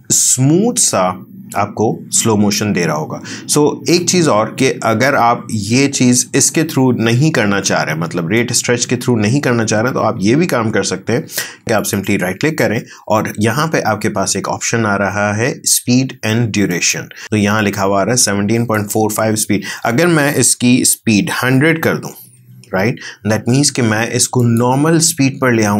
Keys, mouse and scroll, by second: 2.4 space, 6.4 space, 8.4-11.6 drag, 11.8 right click, 25.5 click.